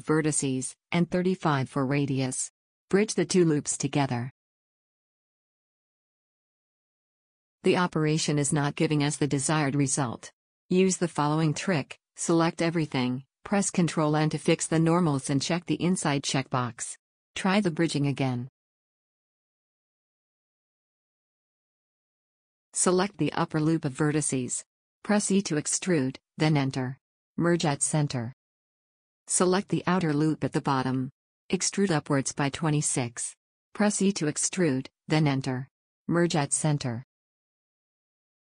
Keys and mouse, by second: 4.6 click, 5.1 w, 11.6 ctrl+z, 13.3 ctrl+z, 13.3 a, 13.5 a, 14.4 ctrl+n, 15.5-17.1 drag, 17.1 a, 17.8 click, 19.0 w, 23.3 a, 24.6 e, 25.8 alt+m, 28.7 a, 31.3 e, 35.0 e, 36.4 alt+m.